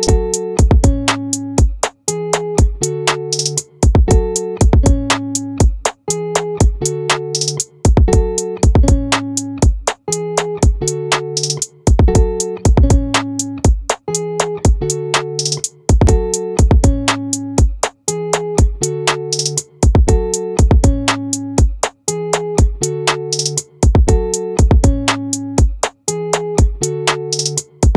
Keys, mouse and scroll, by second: 20.6 z, 23.1 click, 24.6 click, 27.6 click.